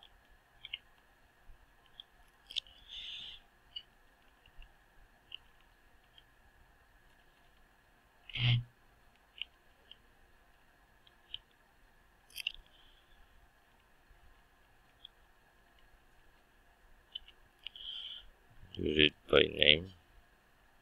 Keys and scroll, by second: 14.9 ctrl+d.